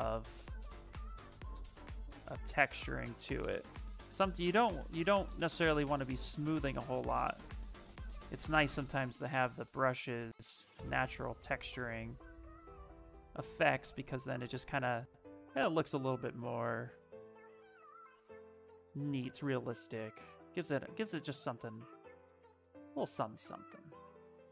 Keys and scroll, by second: 11.1 s, 17.5-19.1 typing, 21.4 s.